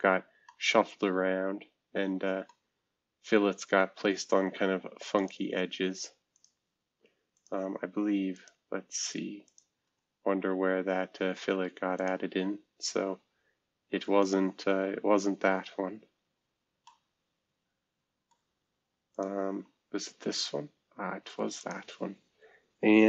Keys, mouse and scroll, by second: 0.0 scroll down 2, 0.5-3.2 middle drag, 2.7-3.2 scroll down 1, 3.2-3.9 scroll up 2, 3.9-5.1 scroll up 1, 5.1 click, 6.3 click, 7.3 click, 9.4 click, 9.8 space, 11.9 click, 12.3 space, 13.6 scroll down 2, 14.2 click, 16.0-16.8 scroll up 2, 16.8-19.1 middle drag, 19.5 space, 20.4 scroll down 2, 21.1 scroll down 4, 21.2 middle click, 21.6 click.